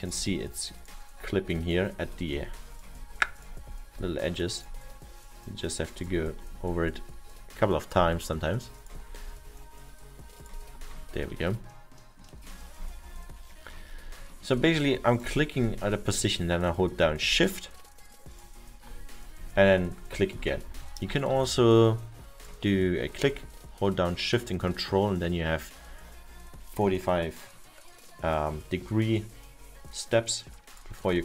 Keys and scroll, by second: 23.5 ctrl+z.